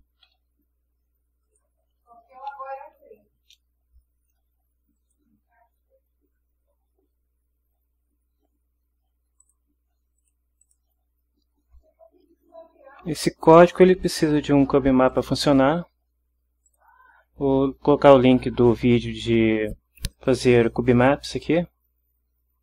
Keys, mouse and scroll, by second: 0.2 ctrl+v, 1.4 click, 3.4 Delete, 4.9 click, 9.4 click, 10.2 click, 10.6 click, 14.0 click, 15.1 click, 16.6 click.